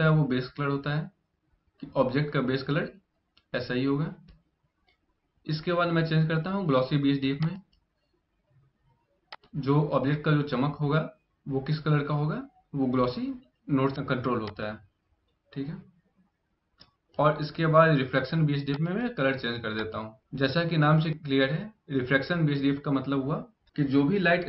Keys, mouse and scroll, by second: 18.5 click.